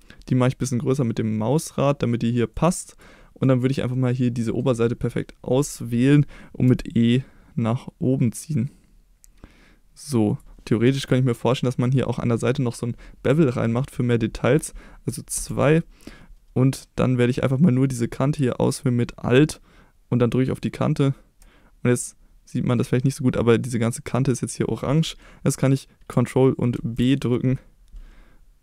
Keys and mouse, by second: 3.4 right click, 3.9 middle click, 6.7 e, 10.3 click, 15.4 2, 20.5 alt+click, 22.0 middle click, 24.8 middle click.